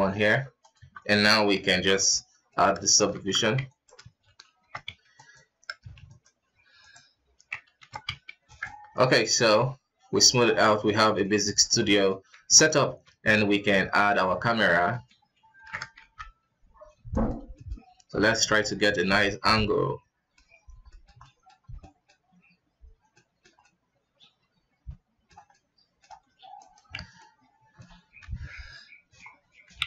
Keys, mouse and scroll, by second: 0.7 Tab, 1.6 ctrl+d, 2.1-3.1 middle drag, 3.1 Tab, 3.6 alt+right click, 4.5 shift+e, 6.0 alt+shift+right click, 6.7 alt+shift+right click, 7.7 shift+e, 8.9 middle click, 9.1-9.6 scroll up 3, 9.6 w, 10.6-11.5 middle drag, 11.5-11.8 scroll up 3, 11.8-12.1 middle drag, 12.1 scroll up 2, 12.4 ctrl+s, 12.6 middle click, 12.9 shift+a, 14.7 shift+middle click, 15.5 ctrl+alt+KP_0, 15.9 q, 17.5 middle click, 17.7 scroll up 2, 18.2-19.1 middle drag, 19.1 scroll up 1, 19.5 middle click, 20.4-20.8 scroll down 2, 20.8-22.4 shift+middle drag, 22.4-23.1 scroll up 1, 23.1-26.2 shift+middle drag, 26.2 q, 26.9 alt+a, 27.2-28.1 middle drag, 28.1 KP_0, 29.1 scroll up 4, 29.7 alt+a.